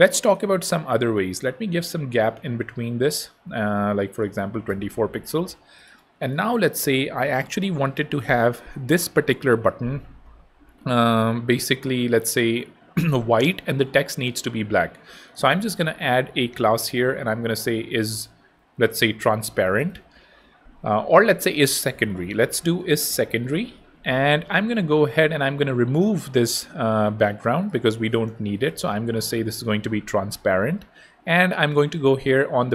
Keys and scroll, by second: 4.0-4.8 typing, 15.9-20.1 typing, 21.2 super+z, 22.1 super+i, 22.3-23.7 typing, 27.9-29.3 typing, 29.4 super+i.